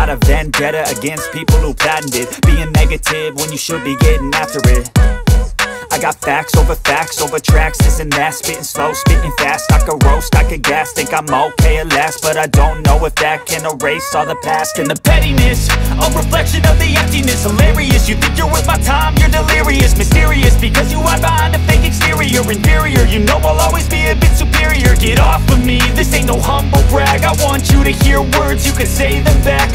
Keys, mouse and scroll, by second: 1.4 y, 6.3 click, 12.4 e, 19.1 click, 20.8 s, 22.2 y, 24.5 0, 26.4 Return, 28.7 click, 29.4 click.